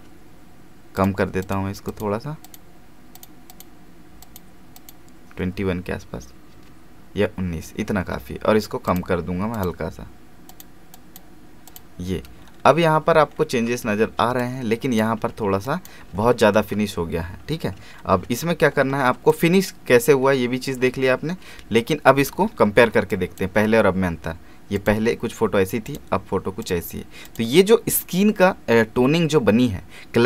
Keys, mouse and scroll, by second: 8.9 click, 12.4 alt+scroll down 1, 12.9 alt+space, 13.9 space, 14.4 ctrl+click, 16.1 alt+scroll down 1, 17.9-18.3 ctrl+scroll up 2, 19.3 click, 20.1 alt+scroll up 1, 22.2 space, 22.5-23.0 alt+scroll down 1, 23.1 click.